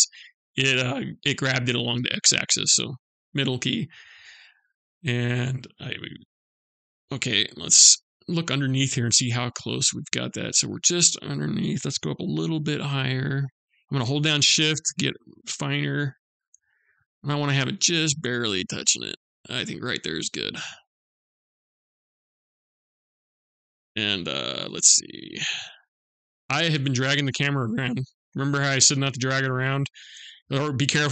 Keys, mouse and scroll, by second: 6.8 middle click, 8.5 scroll up 2, 9.3-9.7 scroll down 1, 9.7-10.2 scroll down 1, 11.4 g, 19.8 middle click, 21.8-22.9 scroll down 7, 22.9 middle click, 24.5-25.8 scroll up 5, 25.8-26.6 scroll down 3, 26.9 middle click, 27.0 scroll up 1, 27.8-28.3 scroll up 1, 28.3 scroll up 1, 28.6 middle click, 29.8-30.5 scroll down 2, 30.6 scroll up 1.